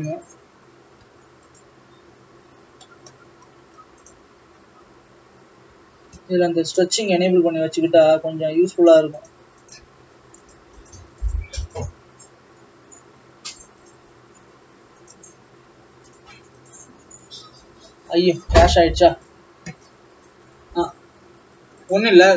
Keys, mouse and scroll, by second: 0.1 a, 1.6 u, 4.2 click, 6.2 n.